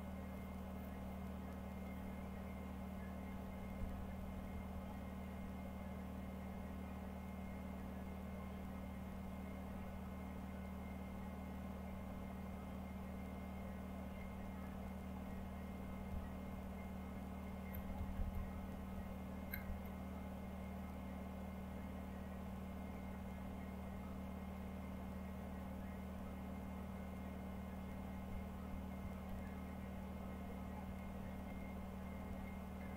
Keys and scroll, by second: 3.9 Down, 4.1 Down, 4.3 Down, 4.5 Down, 4.6-5.3 Down, 14.1 Down, 14.7 Down, 15.2 Down, 15.8 Down, 16.1 Down, 16.5 Down, 17.6 Down, 17.9 Down, 18.1 Down, 18.2 Down, 18.4 Down, 18.6 Down, 18.9 Down, 19.4 Down, 29.2-29.8 Down, 30.8 Down, 31.1 Down, 31.4 Down, 31.7 Down, 32.2 Down.